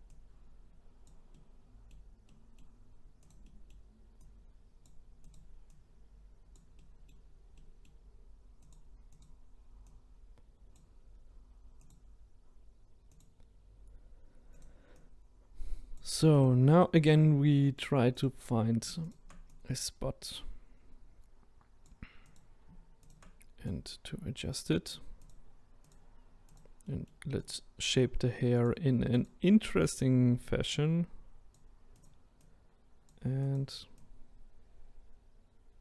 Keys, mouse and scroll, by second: 1.3-3.3 middle drag, 3.3 click, 3.4 middle click, 4.2 click, 5.3 click, 6.7-8.7 middle drag, 8.7 click, 9.2 click, 11.9 click, 13.2 click, 15.0 click, 16.4 click, 16.9 click, 18.2 click, 19.1 shift+click, 22.4 click, 23.1 shift+click, 25.3 click, 26.6 click, 26.9 middle click, 27.4 click, 28.6 click, 30.5 click, 32.0 click, 32.4 click, 33.5 click, 34.1 click.